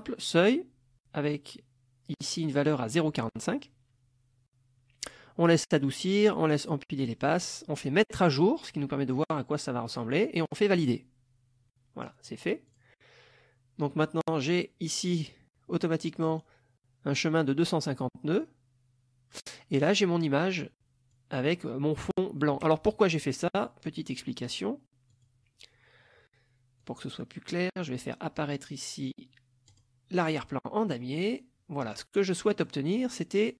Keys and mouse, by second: 8.1 click, 10.8 click, 12.7 click, 18.4 click, 19.8 click, 21.1 click, 25.1 click, 26.8-28.2 drag, 29.7 click, 31.2 click, 31.8 click, 32.5 middle click.